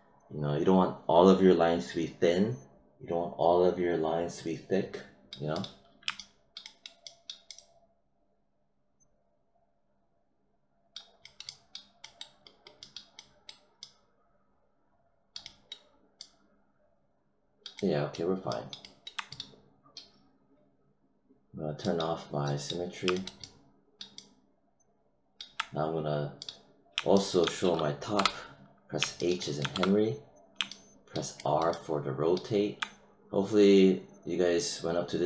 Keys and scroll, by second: 28.1 h, 29.7 e.